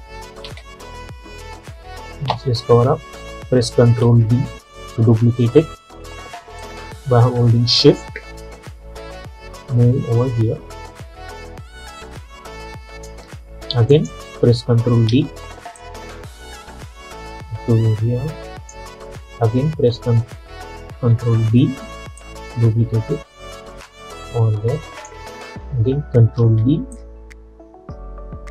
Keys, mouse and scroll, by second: 0.5 space, 4.1 ctrl+d, 5.0 alt+scroll up 1, 6.7-14.0 drag, 15.2 ctrl+d, 15.9-21.5 drag, 21.5 ctrl+d, 22.3-26.5 drag, 26.5 ctrl+d, 27.0-28.5 drag.